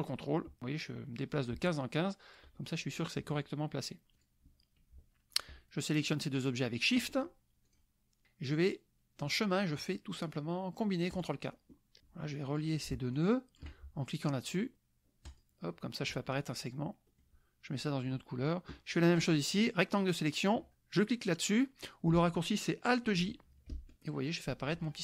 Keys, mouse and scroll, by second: 4.2 click, 5.3 shift+click, 7.6 click, 9.2 click, 11.1 click, 12.0 click, 12.3 click, 13.2 shift+click, 15.2 click, 17.2 click, 19.0-20.1 drag, 23.7 alt+j.